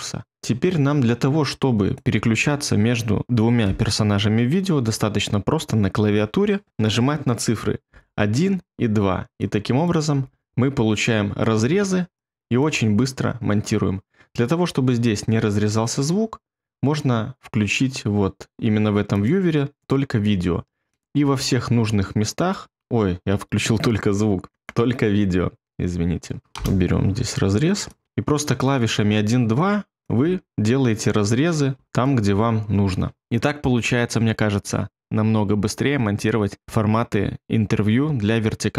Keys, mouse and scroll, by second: 7.8 2, 10.1 1, 11.6 2, 12.7 1, 21.2 2, 26.6 BackSpace, 28.0 1, 29.0 2, 30.2 2, 31.7 1, 32.2 2.